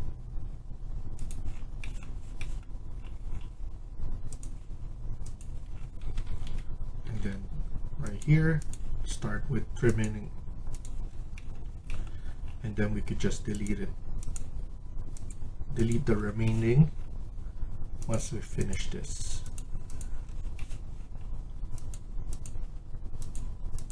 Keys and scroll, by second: 5.9 Escape, 6.1 Escape, 6.3 Escape, 6.7-7.6 typing.